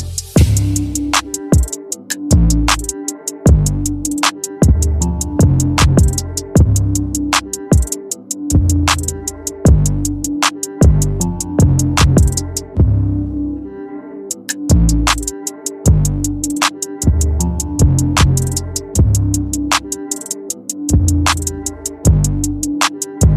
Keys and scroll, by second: 4.6 space.